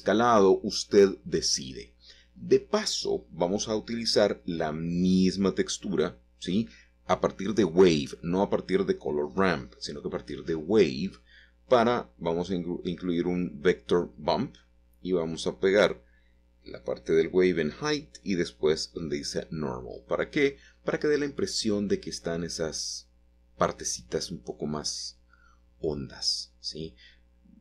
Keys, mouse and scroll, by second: 1.8 click, 2.5-3.8 scroll down 2, 5.5-7.5 drag, 9.4-11.5 drag, 15.4 scroll up 2, 16.2-18.5 shift+middle drag, 19.1 middle click, 19.7 shift+middle click, 20.6 middle click, 23.5 click, 26.2 Return, 26.2 typing.